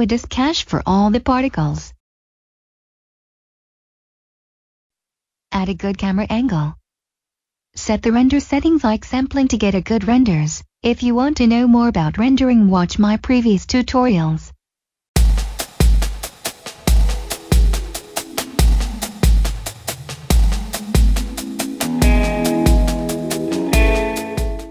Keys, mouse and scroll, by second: 0.6 click, 4.6 scroll up 1, 5.2 click, 5.4 shift+middle click, 6.8 shift+click, 7.2 click, 10.4 Return.